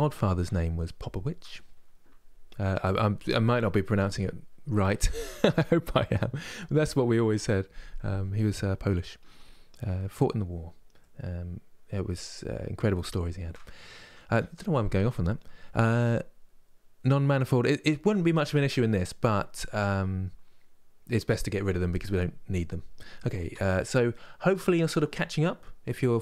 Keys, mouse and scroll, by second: 10.3-10.7 scroll down 1, 10.7-13.8 middle drag, 18.0-26.2 middle drag.